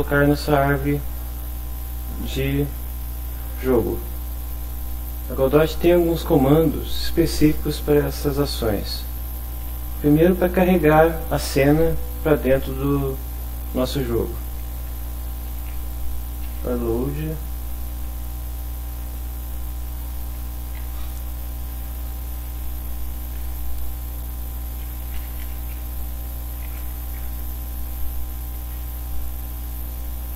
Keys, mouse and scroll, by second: 14.6-16.5 typing, 18.6 shift+9, 20.4 ', 22.0 Right, 22.4 Left, 23.3 Right, 25.0-27.2 typing, 29.7 Left.